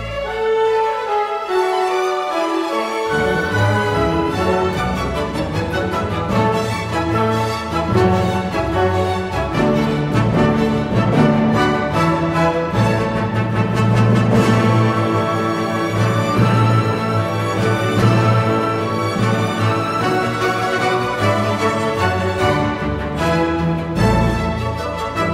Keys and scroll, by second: 12.9 ctrl+v, 25.2 ctrl+shift+c.